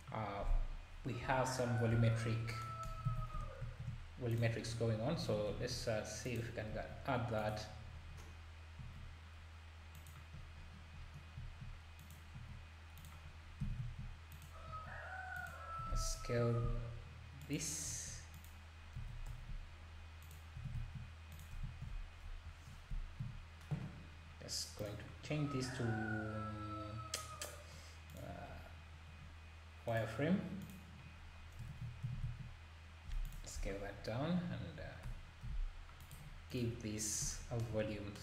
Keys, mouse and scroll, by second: 0.4-1.0 scroll down 9, 1.2 KP_7, 1.9 KP_7, 3.1 alt+a, 3.6 shift+a, 4.7-5.1 scroll down 3, 5.5 s, 7.7-8.8 scroll down 11, 8.8 g, 10.3-10.9 scroll up 1, 10.9 scroll up 9, 11.4 s, 13.3 scroll down 2, 13.6 s, 19.2 s, 22.2 KP_1, 22.7-23.2 scroll up 2, 23.2 z, 24.8 click, 25.2-25.7 scroll down 10, 28.1 click, 29.2-29.9 scroll down 8, 29.9-31.3 drag, 31.3-31.6 scroll up 1, 31.7 ctrl+s, 33.6 KP_7, 33.9-34.3 scroll down 2, 35.0 scroll down 2, 35.0 g, 36.5-37.0 drag, 37.0-37.3 scroll down 2.